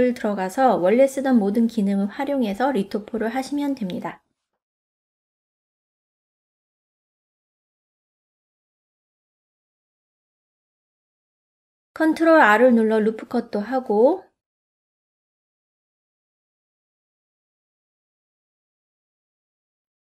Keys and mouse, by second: 0.4 click, 1.1 e, 2.8 click, 3.1 middle click, 4.1 ctrl+middle click, 4.6 middle click, 5.2 click, 5.7 click, 7.0 click, 7.9-9.3 middle drag, 9.8 middle click, 12.9 ctrl+r, 14.1 right click, 14.7-16.7 middle drag.